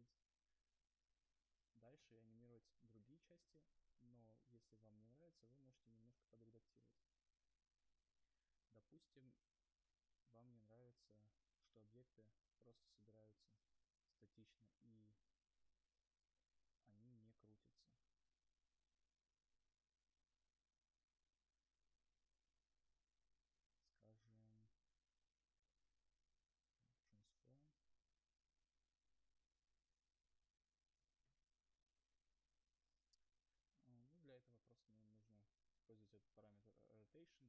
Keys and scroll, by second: 4.7 u, 25.5 ctrl+z, 34.2 ctrl+z.